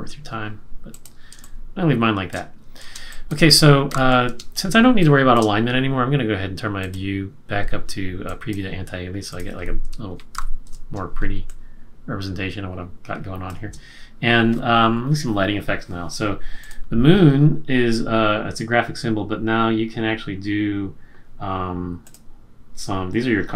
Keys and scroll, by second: 1.3 space, 3.0 space, 3.9 super+-, 4.5 space, 10.3 super+=, 11.1 space.